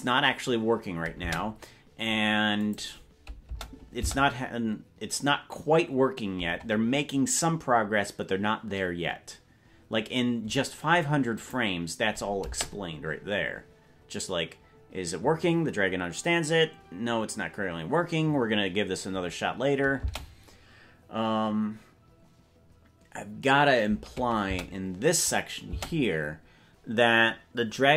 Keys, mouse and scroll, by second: 1.4 space, 2.7 click, 3.6 space, 4.2 space, 11.5 click, 12.6 space, 20.2 space, 24.6 space, 25.8 space.